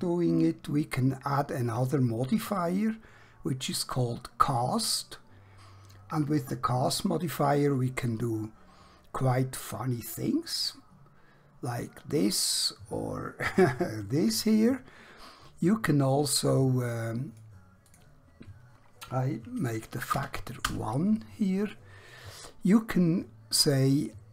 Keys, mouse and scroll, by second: 2.4 click, 10.0 click, 20.2 1, 20.7 Return, 23.5 click.